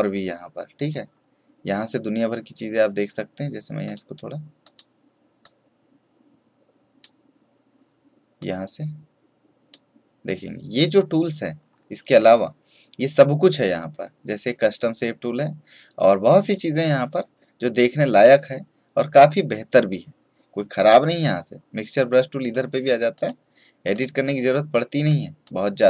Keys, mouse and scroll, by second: 0.7-1.2 scroll down 1, 3.8-11.5 drag, 11.5-13.7 scroll down 1, 21.0-25.8 drag.